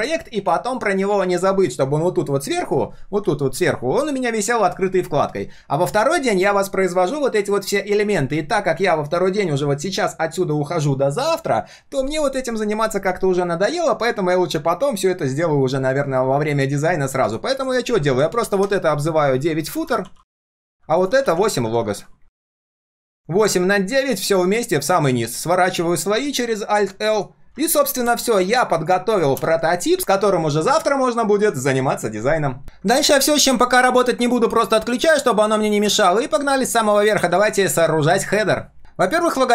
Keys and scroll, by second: 18.4 ctrl+g, 18.6 ctrl+r, 21.2 ctrl+g, 21.7 ctrl+r, 23.1 ctrl+], 24.6 ctrl+shift+[, 25.2 alt+l, 28.5 ctrl+s, 37.3 ctrl+s.